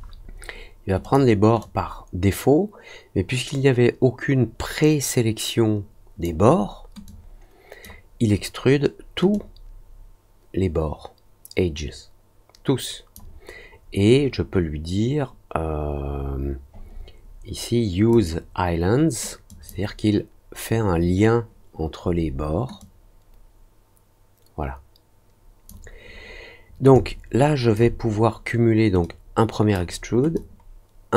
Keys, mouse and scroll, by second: 1.0 click, 1.5-6.2 drag, 7.0-7.8 drag, 9.3-13.1 drag, 16.9 middle click, 18.0 click, 19.4 click, 22.7-25.6 drag, 26.9 alt+click, 29.0-29.7 drag, 30.3-31.1 drag.